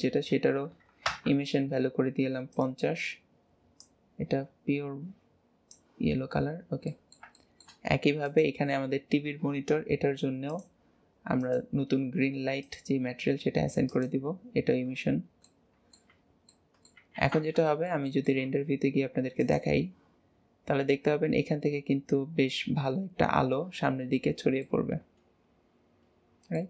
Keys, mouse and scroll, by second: 2.5 click, 6.1-6.6 scroll down 4, 6.9-7.8 middle drag, 7.8-8.2 scroll up 2, 8.2 click, 8.6 Tab, 9.8-10.5 scroll up 4, 10.5-15.1 drag, 15.1-15.5 scroll down 2, 15.5 middle click, 16.1 Tab, 16.5-17.2 middle drag, 17.2 ctrl+s, 17.7-19.4 shift+middle drag, 19.4 click, 24.7-26.6 middle drag.